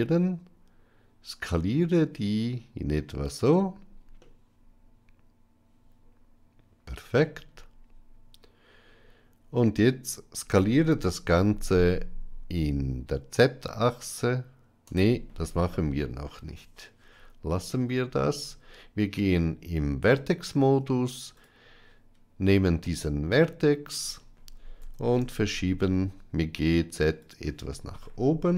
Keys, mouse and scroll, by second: 4.1-7.0 middle drag, 10.4 s, 17.6 middle click, 19.0 Tab, 22.8 middle click, 24.7 g.